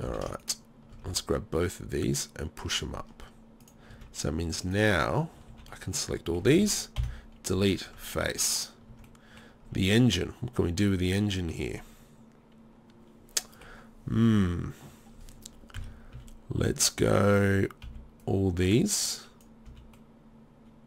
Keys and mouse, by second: 0.1 z, 1.0 z, 3.9 z, 5.3 click, 5.5 z, 7.0 Delete, 8.3 Tab, 8.9 Tab, 9.2 middle click, 10.1 middle click, 11.1-12.6 middle drag, 13.4 middle click, 14.0 middle click, 15.8 KP_3, 16.1 z, 17.9 b.